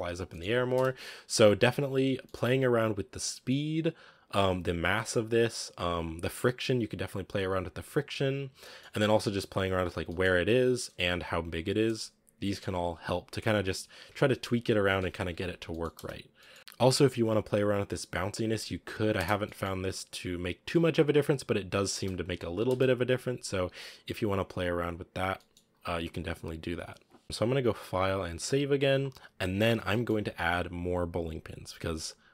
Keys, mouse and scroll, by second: 0.0 scroll down 3, 0.2 middle click, 0.7 space, 0.9 click, 1.5-2.1 scroll down 4, 2.1-3.2 shift+middle drag, 3.2 right click, 7.1-8.2 scroll up 10, 8.2 right click, 8.5 middle click, 9.0 g, 9.9 g, 11.6-12.3 scroll down 2, 12.3 scroll down 1, 12.3-15.4 middle drag, 15.4 a, 15.5 scroll down 3, 15.6 middle click, 15.8 space, 16.3 middle click, 16.6-18.3 drag, 18.5 click, 19.1 space, 19.3 middle click, 19.5-19.9 scroll up 1, 19.9-21.9 middle drag, 21.9 space, 22.3 click, 22.6 space, 23.0-25.3 drag, 25.3-26.0 middle drag, 26.0-27.2 scroll up 1, 27.2-29.8 scroll down 1, 29.8 scroll down 1, 29.9 middle drag, 30.1-30.7 scroll up 3, 30.7 right click.